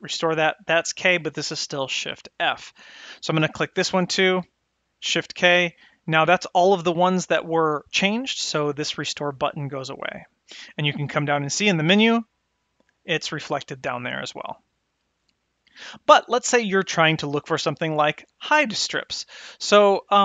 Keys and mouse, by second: 3.6 click, 11.5-15.9 drag.